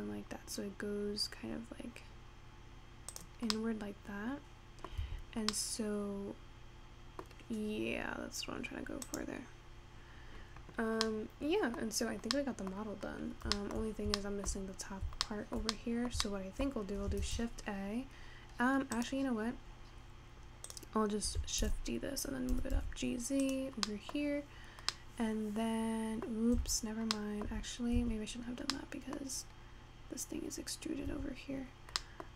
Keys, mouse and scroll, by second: 3.5-5.1 middle drag, 5.1 Tab, 5.6-7.6 middle drag, 7.6-8.3 scroll down 1, 9.1 click, 11.2-11.9 middle drag, 11.9-12.5 scroll down 2, 12.5 middle click, 13.2 scroll down 1, 13.8 shift+middle click, 14.1 scroll up 1, 14.7-15.5 scroll up 3, 15.5-17.5 shift+middle drag, 17.5 shift+a, 19.5-20.1 scroll down 10, 20.1-20.8 scroll up 4, 20.8 click, 21.8 shift+d, 24.0 middle click, 24.4-25.0 scroll up 6, 25.0-26.8 middle drag, 26.8 Tab, 27.2 middle click, 28.2 Tab, 29.0-31.3 middle drag, 31.3 Tab, 32.1 middle click.